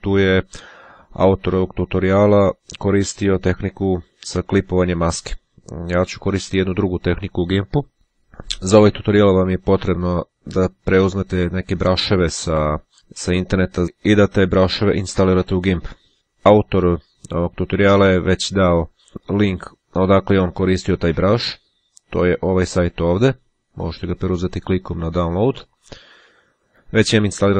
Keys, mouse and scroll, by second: 16.1-16.5 scroll down 2, 19.7 click, 21.2 click, 22.6 click.